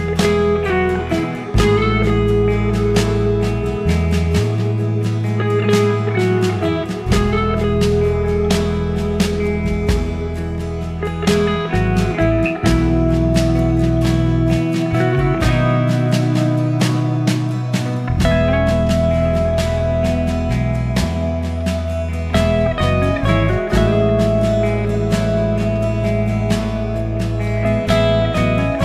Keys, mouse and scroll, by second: 1.8 click, 4.8 click, 7.8-17.7 drag, 17.7-18.7 scroll up 4, 18.7 click.